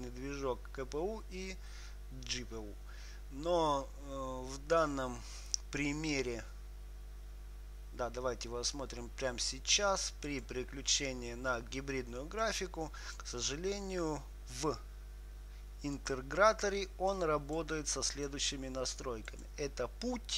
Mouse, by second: 12.7-14.5 drag, 16.3-20.3 drag.